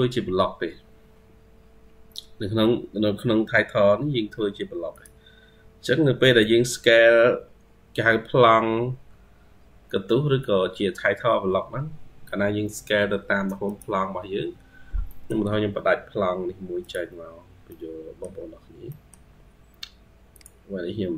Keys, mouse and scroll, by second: 5.6 scroll down 5, 6.2 middle click, 14.9 middle click, 15.3 Escape, 17.5 middle click, 18.4-18.7 scroll down 1, 18.7 middle click.